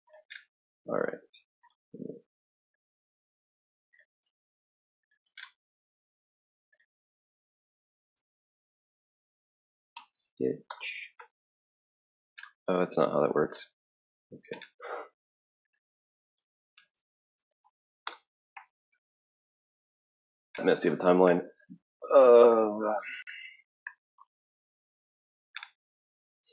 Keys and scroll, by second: 7.7-10.7 typing, 15.3-18.2 typing.